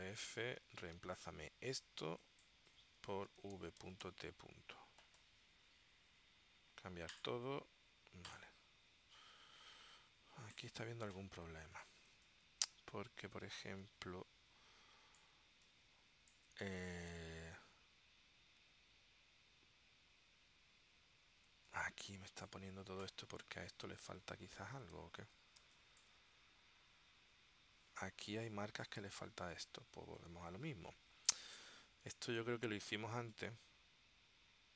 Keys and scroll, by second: 0.9 super+v, 3.4 shift+v, 3.9 shift+t, 12.2 space, 21.6 space, 25.8 space, 28.4 space, 30.4 space, 33.3 space.